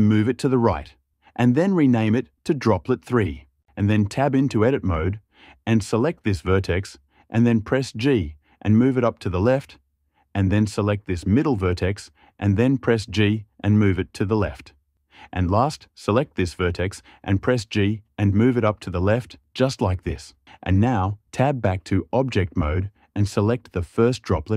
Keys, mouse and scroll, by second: 0.4 click, 4.5 Tab, 5.5 click, 5.7-6.8 drag, 7.5 g, 9.8 click, 10.3 click, 11.3 click, 12.7 g, 14.9 click, 17.4 g, 19.9 click, 20.6 Tab, 23.7 click.